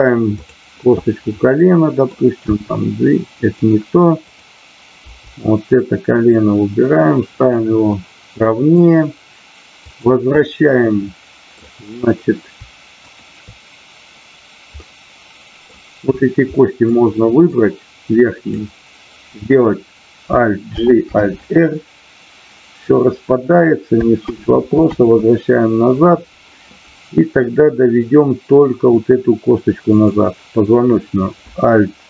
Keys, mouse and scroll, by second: 0.3-1.2 drag, 1.6-2.3 middle drag, 3.5 click, 4.2 click, 7.4 click, 7.4 g, 7.9-8.8 middle drag, 9.8 click, 10.7-11.5 middle drag, 13.1 shift+click, 14.8-15.8 middle drag, 16.5 middle click, 17.5-18.6 drag, 20.7 alt+g, 21.2 alt+r, 24.9 ctrl+z.